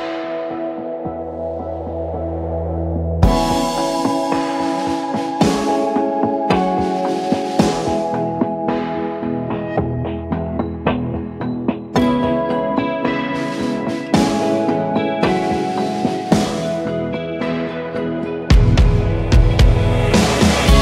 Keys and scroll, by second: 0.0-4.5 typing, 0.5 Return, 0.9 ctrl+t, 3.4 ctrl+a, 4.8 Return, 4.9 Return, 6.5-8.4 typing, 9.2 ctrl+j, 10.3 ctrl+t, 12.6 Return, 15.3-18.8 typing, 19.0 Return, 20.6 BackSpace, 20.7 Return.